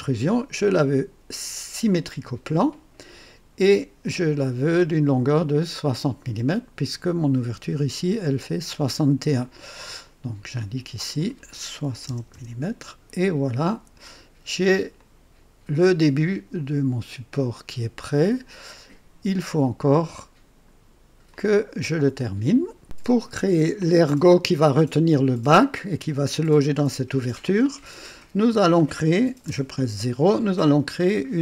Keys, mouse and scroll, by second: 2.0 click, 4.0-5.2 drag, 10.5 click, 11.8 KP_6, 12.0 KP_0, 12.2 KP_Enter, 13.6 click, 14.9-19.8 drag, 20.1 click, 21.2-22.8 drag, 23.2 scroll up 2, 23.7 click, 25.4-26.0 drag, 27.4-28.2 drag, 28.4 click, 29.4 KP_0, 29.4 KP_0, 31.0 scroll down 1.